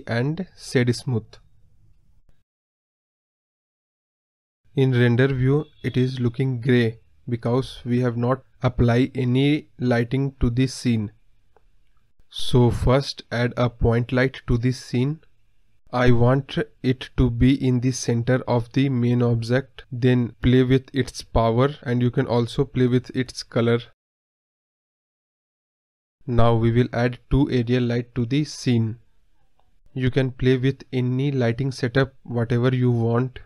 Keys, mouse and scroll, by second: 0.8-4.7 drag, 4.7 scroll down 2, 4.7 middle click, 5.9-7.1 drag, 7.1 scroll up 2, 7.5-8.5 middle drag, 10.1 click, 10.2 scroll down 1, 10.3-11.9 middle drag, 11.9 shift+a, 12.4 middle drag, 12.6 scroll up 3, 12.8-14.1 middle drag, 14.1 click, 15.1 KP_1, 15.7 click, 18.0-19.5 drag, 19.5 KP_0, 20.1 click, 20.4 scroll down 1, 20.5-21.1 scroll up 1, 21.1-21.4 scroll down 2, 21.4-22.8 middle drag, 22.8-26.5 drag, 26.5 scroll up 2, 26.6-27.1 middle drag, 27.1-27.6 scroll down 4, 27.2 middle drag, 29.3 scroll up 2, 29.4 middle drag, 29.7 KP_1, 30.4 g.